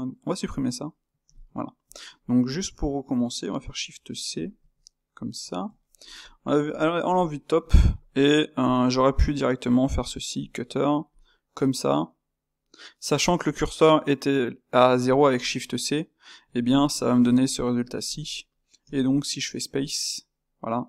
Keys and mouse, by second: 0.4-1.4 drag, 1.4 x, 1.8 click, 4.6 shift+c, 5.4-6.6 ctrl+shift+middle drag, 6.6 KP_7, 7.2-8.6 shift+middle drag, 8.6 click, 10.6 space, 15.9-20.8 middle drag.